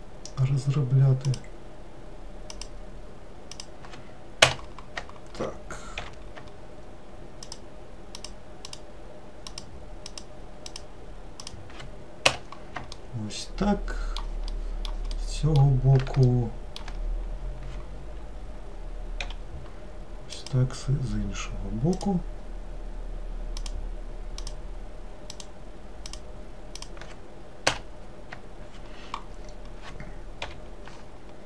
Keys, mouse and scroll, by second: 6.1 k, 13.1-19.4 middle drag, 19.4 k, 30.6 k.